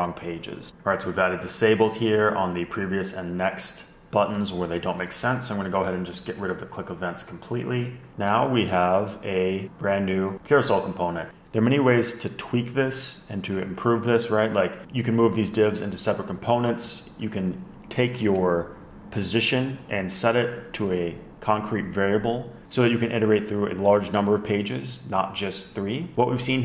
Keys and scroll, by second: 4.3 alt+shift+Left, 4.5 alt+shift+Left, 6.4 super+x, 17.7 Tab, 17.9 Tab.